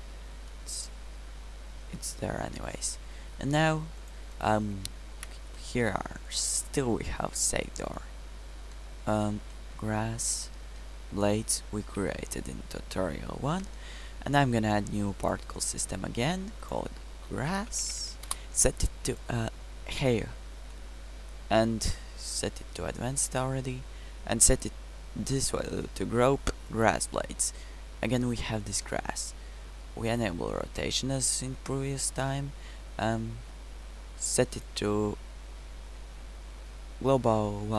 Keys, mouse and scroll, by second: 5.2 2, 13.5 1, 18.2 s, 21.2-24.0 middle drag, 28.0 middle click, 29.0 middle click.